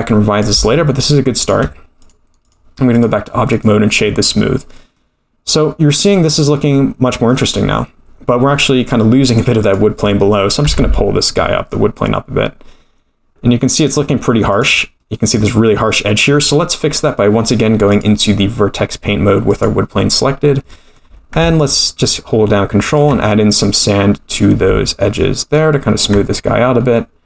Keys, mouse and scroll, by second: 0.9 shift+click, 2.0-2.5 drag, 2.9 right click, 4.9-6.0 middle drag, 6.3-6.7 scroll up 4, 6.7-7.4 middle drag, 7.5-9.4 scroll down 2, 9.6 click, 10.6 g, 15.0-15.4 middle drag, 15.9-16.5 middle drag, 17.0-17.3 scroll down 1, 17.9-19.6 drag, 20.7 middle click, 21.6 ctrl+click, 25.5 ctrl+click, 26.6-27.2 scroll down 1, 27.2 scroll down 1.